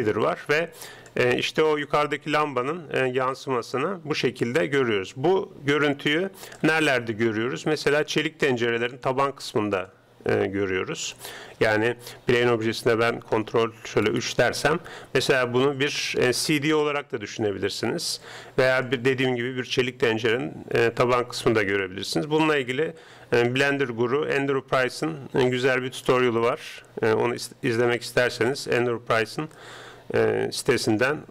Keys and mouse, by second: 0.1 middle click, 0.3 middle click, 0.5 middle click, 0.9 middle click, 1.3 middle click, 1.8-3.6 middle drag, 13.5 ctrl+3, 14.3-16.7 middle drag, 19.3-21.1 middle drag, 24.9-28.3 middle drag, 28.8-31.3 middle drag.